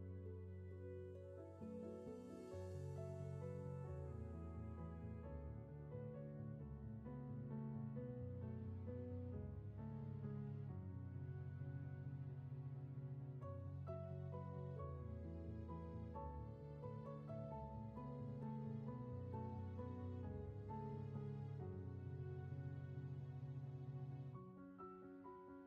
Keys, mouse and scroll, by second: 0.1 space, 16.0 ctrl+z.